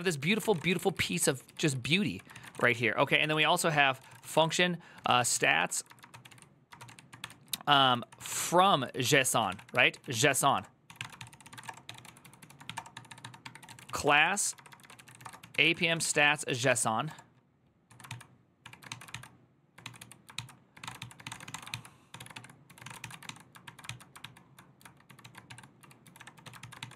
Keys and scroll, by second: 0.0-0.8 typing, 1.1 ctrl+u, 1.9-23.5 typing, 23.6 ctrl+c, 24.7-26.9 typing.